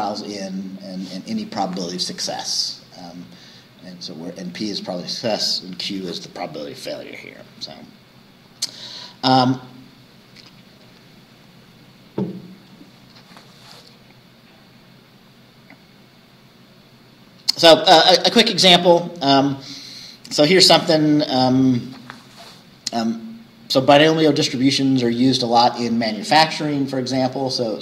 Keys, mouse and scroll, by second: 0.8-5.1 scroll down 1, 5.1-7.5 scroll down 1, 7.5-8.5 scroll down 3, 9.3-12.9 scroll up 2, 12.9 scroll down 2, 16.3 scroll down 2, 16.5 scroll up 2.